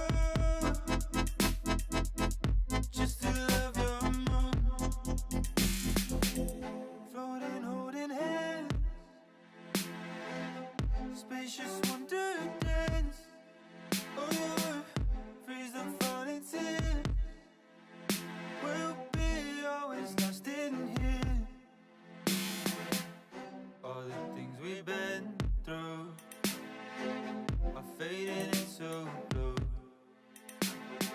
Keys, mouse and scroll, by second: 0.2-0.5 scroll up 2, 0.5 shift+middle click, 1.0 s, 2.4 g, 3.6-4.6 middle drag, 4.6 s, 6.0 s, 6.7 middle click, 7.6 g, 8.6 click, 8.8 middle click, 9.3 scroll down 3, 9.5 shift+middle click, 10.2 click, 10.8 shift+click, 11.2 middle click, 11.9 shift+click, 12.3 shift+click, 12.5-14.5 middle drag, 14.5-14.9 scroll up 1, 14.9 middle click, 15.7-17.0 scroll up 1, 22.6 click, 23.7 ctrl+r, 26.3 ctrl+r, 28.3 alt+shift+click, 28.6 alt+shift+drag, 28.8-29.4 middle drag, 29.4-30.2 scroll up 2, 30.2 ctrl+b.